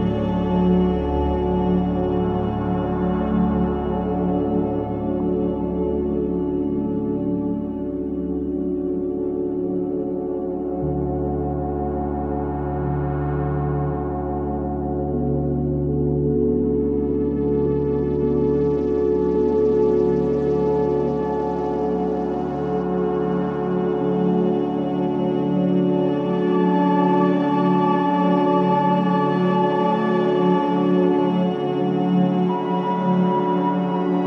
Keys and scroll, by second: 5.3 4, 13.5 ctrl+d, 13.6 Escape.